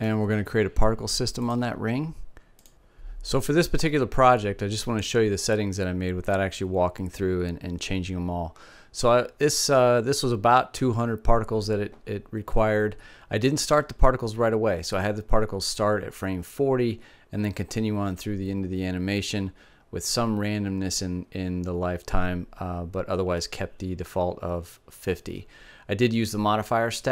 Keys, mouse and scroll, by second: 1.0-2.7 drag.